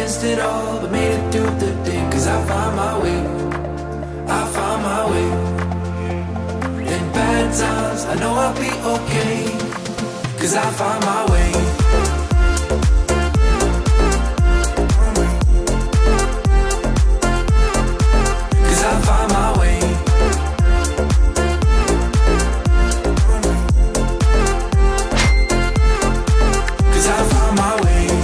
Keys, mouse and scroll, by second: 0.0-0.4 typing, 4.1 middle click, 5.7-7.7 drag, 9.8 8, 10.0 Return, 11.6 click, 12.3 5, 12.6 Return, 14.7-22.9 drag, 23.2 click.